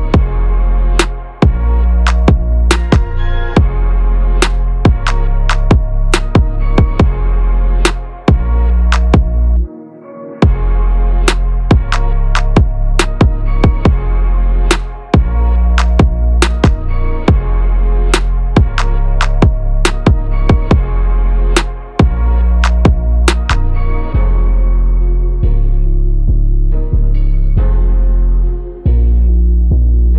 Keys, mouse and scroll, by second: 7.9 click, 9.8 click, 14.1 click, 16.7 click, 19.2 click, 20.1 5, 21.8 click, 27.7 click, 29.2 ctrl+c.